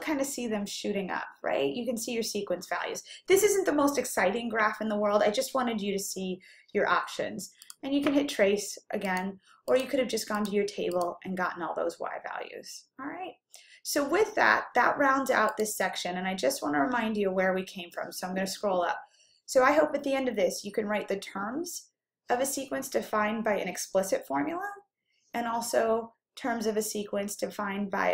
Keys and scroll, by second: 9.2 Right, 9.8 Right, 10.4 Right, 11.0 Right, 15.7-17.8 typing, 19.9-20.7 typing.